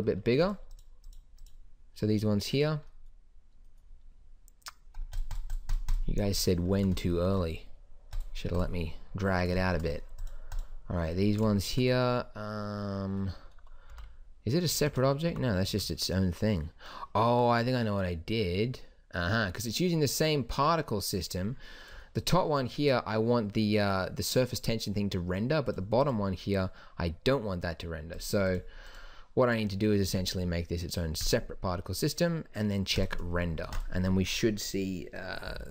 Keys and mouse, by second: 0.0 Escape, 11.8 middle click, 14.2 g, 15.6 g, 22.6-25.5 drag, 26.0-29.8 drag, 31.1 middle click, 33.9 ctrl+s.